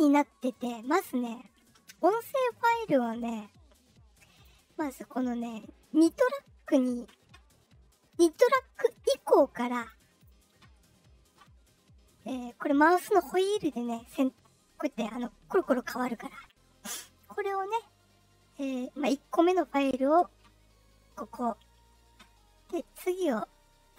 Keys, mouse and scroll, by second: 0.4 click, 1.4 click, 1.8 click, 2.0 click, 2.3 click, 4.3 click, 9.7 click, 10.1 click, 14.9-16.2 scroll up 6, 16.2-17.4 scroll down 8.